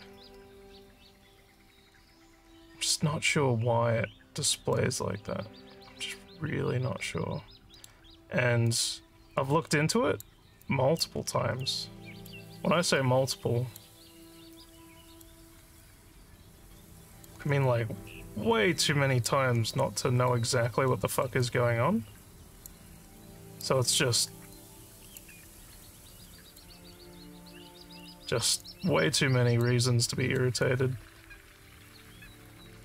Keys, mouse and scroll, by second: 4.7-6.4 alt+middle drag, 6.8 alt+middle click, 7.1 alt+middle click, 8.7-10.3 alt+drag, 10.6 alt+click, 11.7 click, 13.0 alt+click, 14.6 click, 15.8-17.3 alt+drag, 17.7-19.3 drag, 19.8 alt+click, 20.6 alt+scroll up 4, 20.9 alt+middle click, 21.4-22.7 alt+drag, 23.2 alt+click, 24.6 click, 25.9 alt+click, 27.5 click, 28.6 alt+click, 30.0 alt+middle click, 30.6-32.8 alt+drag.